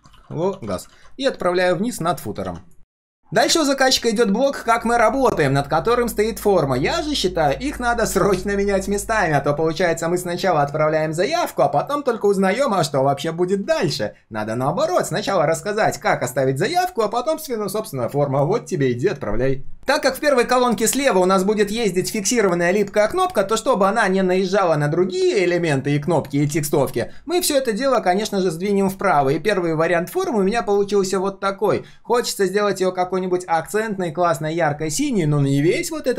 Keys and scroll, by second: 0.9 ctrl+s, 1.5 ctrl+shift+[, 2.0 ctrl+], 2.4 ctrl+s.